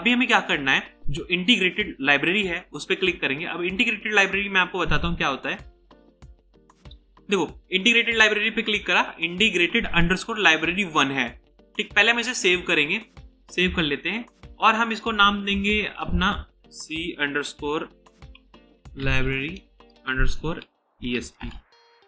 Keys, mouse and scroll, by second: 11.7 right click, 16.7-22.0 typing.